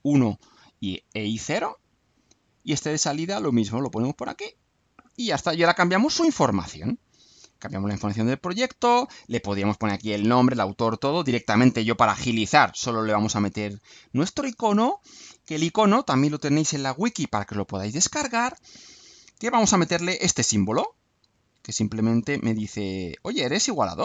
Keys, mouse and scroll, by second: 2.1 click, 3.5 click, 4.5 click, 7.4 click, 8.8 click, 13.4 click, 17.7 click, 19.3-20.1 alt+drag, 20.8-21.4 ctrl+drag, 21.7-22.3 ctrl+shift+drag, 22.6-23.4 alt+shift+drag, 23.9 click.